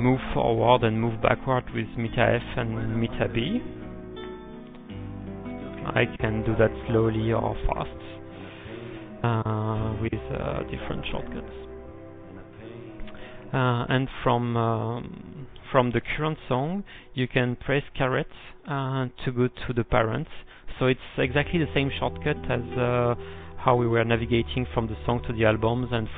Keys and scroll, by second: 5.4-6.2 typing, 8.6-9.9 typing, 10.0 alt+b, 16.2-17.0 typing.